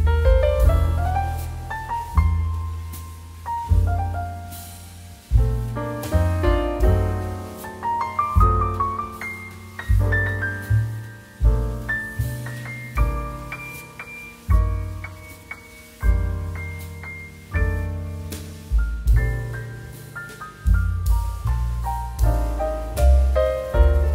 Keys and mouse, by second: 1.8 right click, 2.0 click, 8.6 typing, 9.0 Return, 11.0 click, 11.8 click, 14.4 7, 15.0 BackSpace, 15.1 2, 15.4 Return, 16.3 right click, 16.5 click, 22.3 click, 23.6 middle click.